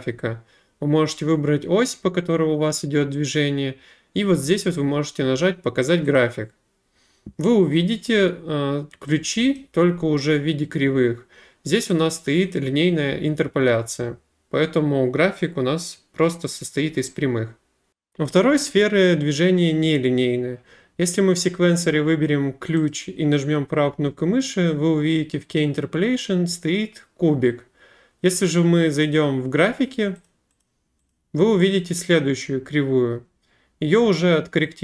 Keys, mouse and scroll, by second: 6.2 click, 9.6 click, 12.5 click, 22.9 right click, 28.4 click, 29.1 click, 30.3 click, 30.6 click, 31.1 click.